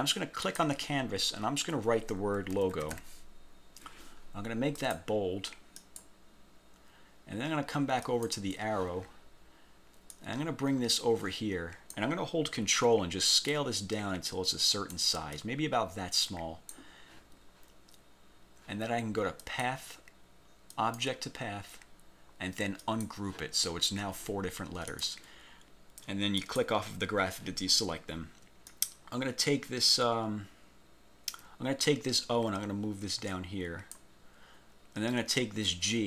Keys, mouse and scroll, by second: 0.6 click, 2.4-3.3 typing, 4.9 click, 5.9 click, 8.2 click, 10.2-12.2 drag, 13.6-15.2 ctrl+drag, 15.4-17.0 ctrl+drag, 19.5 click, 20.8 click, 22.9 click, 25.0 click, 26.5 click, 28.8-34.3 ctrl+drag.